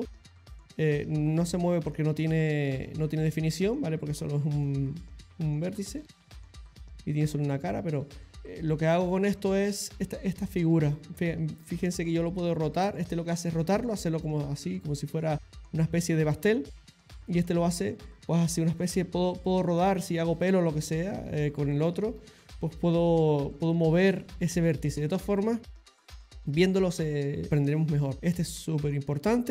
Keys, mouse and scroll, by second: 0.2 middle click, 0.9 click, 1.9 middle click, 3.0 click, 3.6 middle click, 4.6 middle click, 6.3 click, 8.0 click, 17.3 click, 28.2 click, 28.4 middle click, 29.3 middle click.